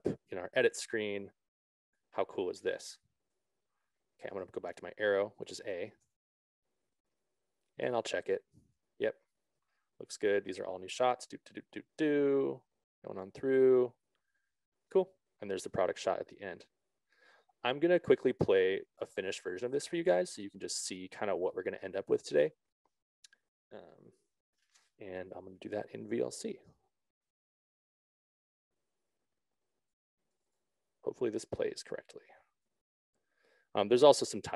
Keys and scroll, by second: 6.6 a, 10.0 Down, 12.7 Up, 13.6 Down, 20.2 Down, 28.2 alt+Tab.